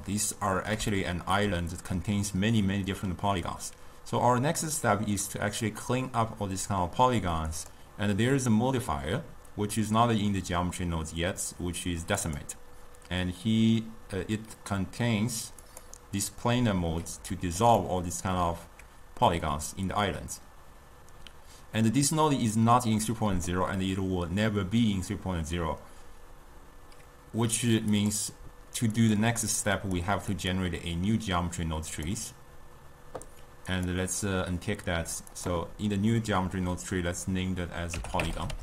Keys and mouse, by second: 7.7-10.7 drag, 16.3 click, 17.7-21.0 ctrl+middle drag, 27.9-33.3 drag, 33.6 click, 35.4-38.4 drag.